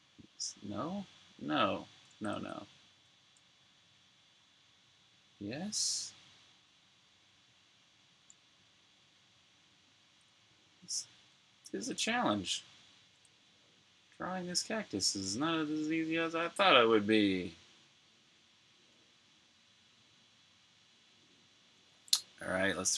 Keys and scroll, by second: 2.2 super+z, 10.2 super+z.